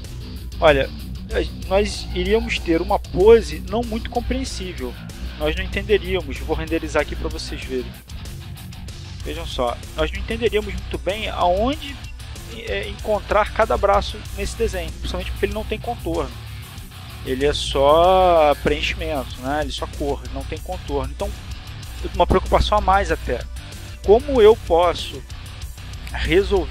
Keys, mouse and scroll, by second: 0.0 F12, 24.7 Escape, 25.9 r.